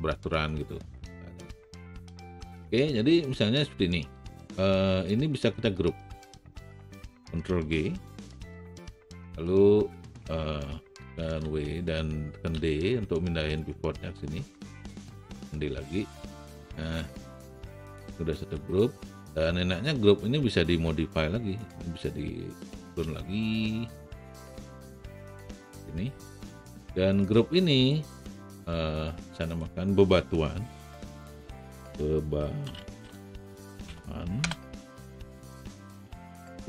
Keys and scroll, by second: 8.1 ctrl+g, 11.2 w, 12.5 d, 16.1 alt+d, 24.1 r, 31.6-34.4 typing.